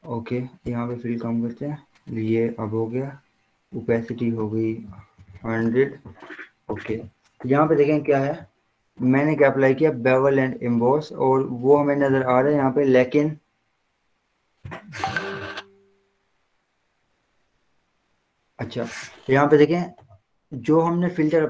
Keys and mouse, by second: 1.0 click, 4.2 click, 4.9 ctrl+a, 5.2-6.0 typing, 7.9 click.